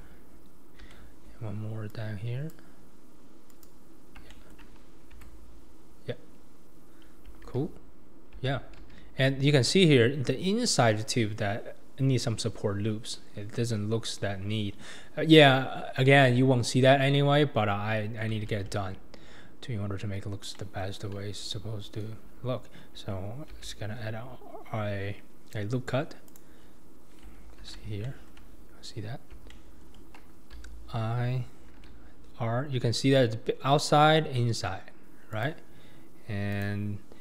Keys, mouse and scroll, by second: 5.2 Tab, 5.6-6.4 scroll down 2, 6.4-7.3 scroll up 2, 7.4 alt+z, 8.3 alt+z, 8.8 alt+z, 16.5-17.1 scroll down 2, 17.1-17.9 middle drag, 17.9-18.4 scroll up 4, 18.5 alt+z, 18.8-19.6 scroll down 2, 19.6-20.3 scroll up 2, 20.5-21.5 middle drag, 21.5 Tab, 23.5 ctrl+r, 26.6-27.3 scroll down 5, 27.6 alt+z, 28.0 shift+middle click, 28.5-29.5 scroll up 2, 29.5-30.5 shift+middle drag, 30.5 1, 31.8 ctrl+r.